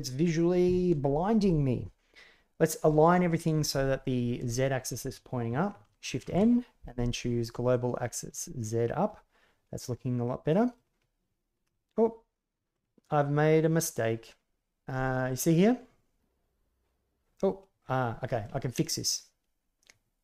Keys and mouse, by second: 4.5-4.8 shift+middle drag, 6.2 shift+n, 8.2-10.7 middle drag, 11.6-12.7 middle drag, 15.3 right click, 16.2-18.4 middle drag, 19.0-20.2 middle drag.